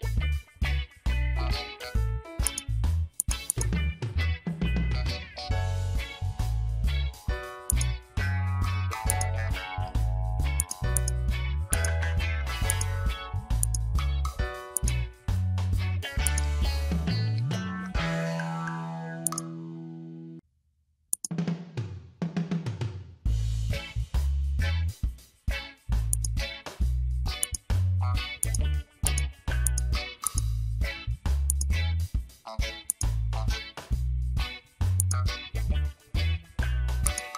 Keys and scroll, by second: 1.3 Return, 5.1 Return.